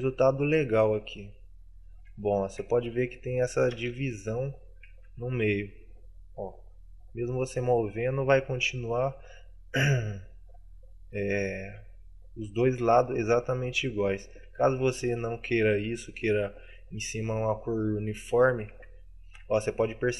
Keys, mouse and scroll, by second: 2.4 shift+middle click, 3.2 Tab.